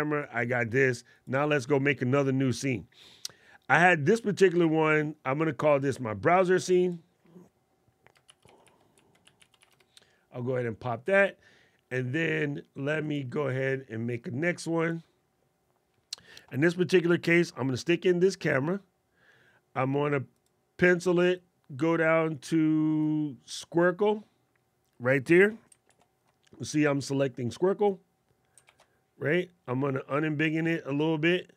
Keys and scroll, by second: 8.0 shift+b, 28.7 alt+super+8.